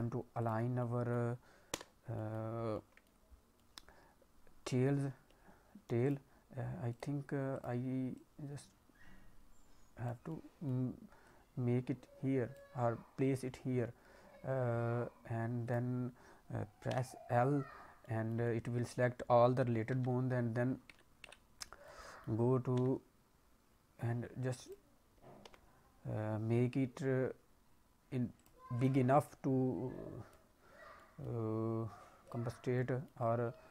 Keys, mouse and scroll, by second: 0.3 click, 0.7 middle click, 1.7 l, 2.1 middle click, 2.7 middle click, 3.5 middle click, 5.0 g, 6.9 click, 7.5 click, 8.1 click, 10.3 middle click, 13.3 click, 15.6 click, 16.9 l, 18.0 middle click, 18.4 middle click, 20.1 s, 21.6-22.0 scroll down 2, 22.0 middle click, 22.7 s, 25.3 g, 28.7 click, 29.2 click, 30.9 middle click, 32.2 click, 32.6 scroll down 1, 32.7 middle click.